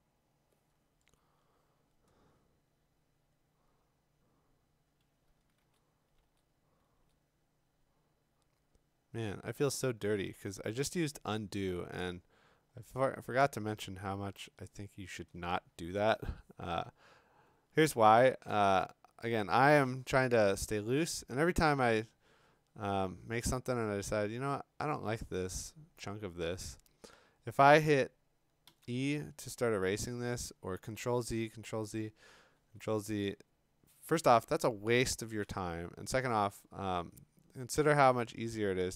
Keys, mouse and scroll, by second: 1.0 x, 5.6 ctrl+z, 6.2 ctrl+z, 6.9 ctrl+z, 18.4 click, 31.0 ctrl+z, 31.6 ctrl+z, 32.6 ctrl+z, 35.4 b, 37.8 x.